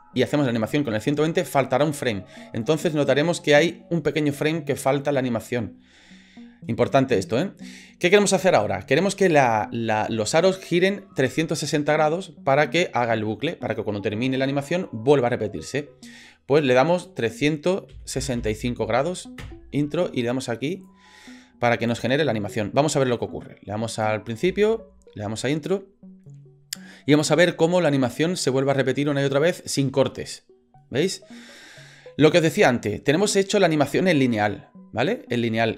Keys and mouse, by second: 17.0-19.9 drag, 20.7 click, 23.9 click, 24.4 space.